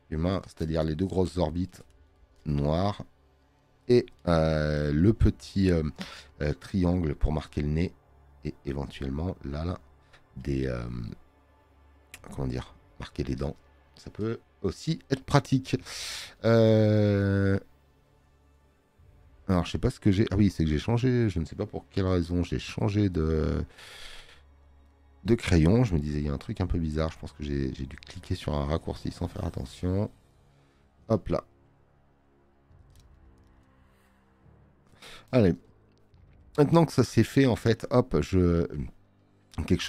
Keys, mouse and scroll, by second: 10.3 space, 10.5 click, 20.9 click, 23.5 click, 39.0 space, 39.2 click.